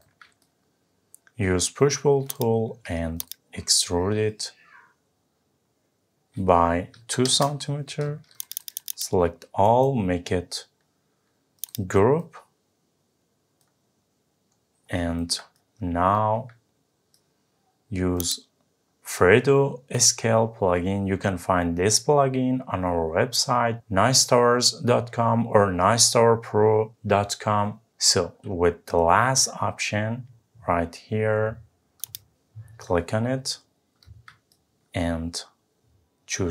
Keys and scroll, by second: 7.2 Return.